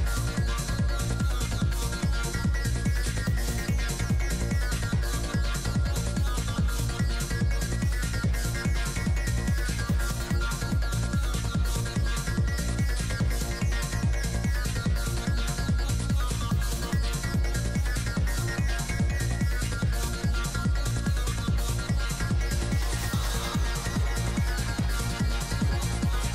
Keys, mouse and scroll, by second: 1.9-3.6 typing, 2.0 middle click, 4.1 click, 4.1 middle click, 6.0-7.1 drag, 8.7 g, 8.7 f, 9.1 f, 9.8 click, 11.3 i, 11.3 f, 12.1-13.4 drag, 17.0 f, 17.2-18.8 drag, 18.8 f, 19.0 middle click, 19.2-21.6 drag, 19.4 f, 21.1 middle click, 21.9 f, 22.1 click, 22.8 shift+f, 23.2-24.6 drag, 25.0-26.3 typing, 25.3-26.3 drag.